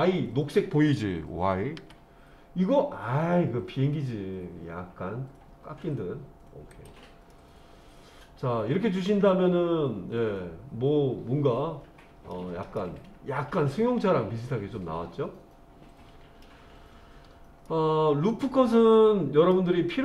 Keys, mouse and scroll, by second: 1.8 y, 6.7 click, 7.3-12.3 middle drag, 12.8-16.4 middle drag, 17.7-19.6 middle drag.